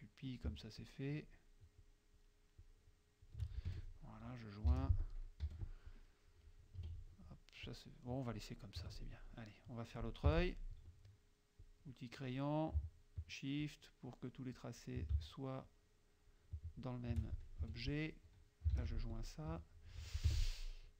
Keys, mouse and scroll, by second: 0.8 shift+click, 1.9 shift+click, 2.7 shift+click, 3.8 shift+F2, 3.8 shift+click, 4.8 shift+j, 5.1 shift+click, 5.5 shift+F1, 6.8 F2, 7.7 click, 8.9 KP_Subtract, 9.1 click, 10.3 F6, 11.6 click, 13.6 shift+click, 14.6 shift+click, 15.7 shift+click, 17.6 F2, 17.8 click, 18.8 shift+j, 19.2 shift+click, 19.6 shift+F1, 20.3 F6.